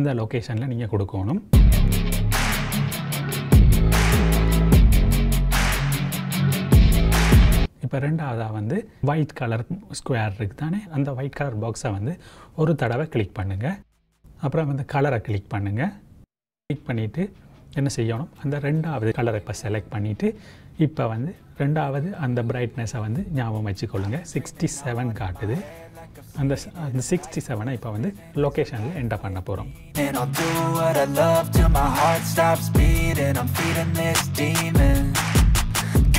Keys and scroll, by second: 35.8 KP_5, 36.0 KP_7.